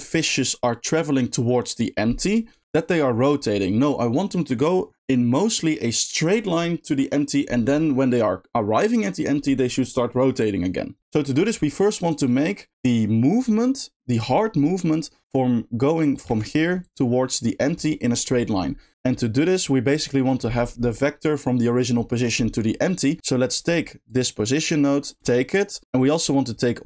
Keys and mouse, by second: 2.7 click, 16.8 click, 18.9-23.4 drag, 23.4 middle click, 24.0 click, 24.3 click, 24.9 middle click, 25.2 shift+d, 25.5 click, 26.2 middle click.